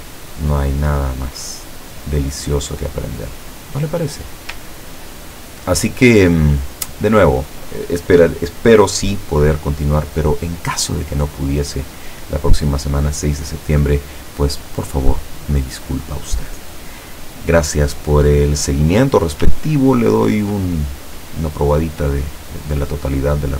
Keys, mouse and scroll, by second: 4.9 ctrl+scroll down 2, 6.1 ctrl+scroll up 2, 7.3 click, 7.9 click, 11.6 scroll up 2, 19.5-20.5 ctrl+scroll down 4.